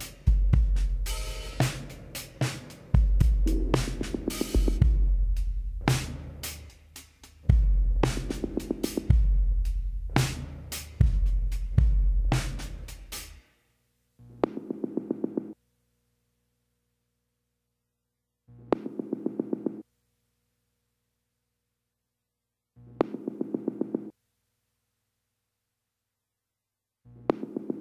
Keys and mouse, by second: 1.4-3.1 drag, 1.7 b, 3.2 KP_7, 4.5 click, 5.4 click, 10.9-14.0 drag, 11.1 b, 17.1-18.7 drag, 17.3 b, 18.7 b, 20.0-21.7 drag, 24.5-27.6 drag, 24.8 b.